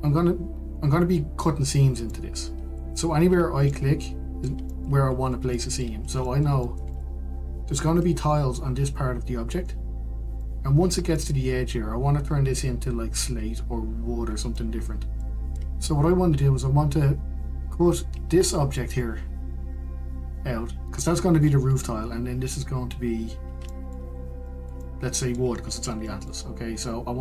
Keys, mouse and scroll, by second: 0.2-0.5 scroll down 1, 0.5-6.3 middle drag, 6.3-6.8 scroll up 2, 6.8-12.7 shift+middle drag, 12.7 scroll up 1, 15.0 scroll down 1, 15.8-20.7 middle drag, 25.0 shift+middle click, 25.3-25.7 scroll up 1, 25.7-27.2 shift+middle drag.